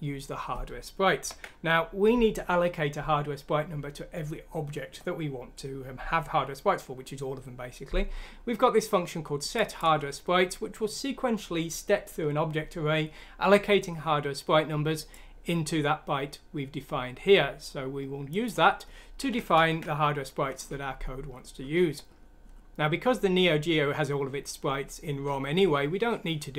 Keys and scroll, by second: 1.2 ctrl+End, 19.6 ctrl+Home.